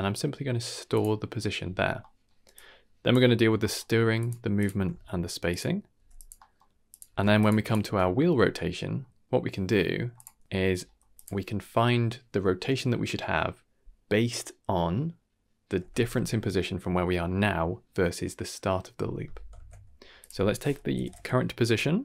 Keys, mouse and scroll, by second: 1.0-2.5 middle drag, 1.8 scroll down 2, 2.5-3.1 drag, 3.1-4.1 middle drag, 4.1 shift+click, 4.2-5.5 shift+middle drag, 4.6 shift+click, 4.9 g, 5.9 g, 6.3 middle click, 6.9 click, 7.0 g, 7.6 click, 7.8 Tab, 8.7-9.0 middle drag, 9.9 click, 10.1 middle click, 10.6 scroll up 1, 10.8 middle click, 11.1 click, 19.5 shift+a.